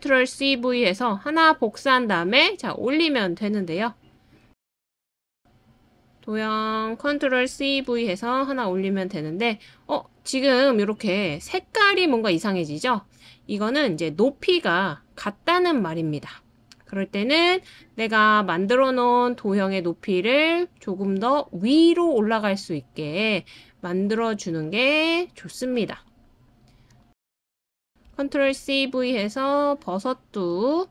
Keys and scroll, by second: 0.0 super+c, 0.3 super+v, 7.5 super+c, 7.8 super+v, 28.1 super+c, 28.5 super+v.